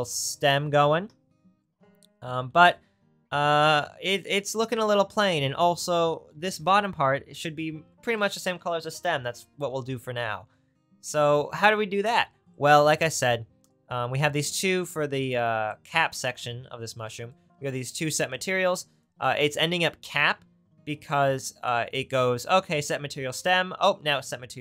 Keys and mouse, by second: 15.0-18.5 drag, 19.1-24.6 drag.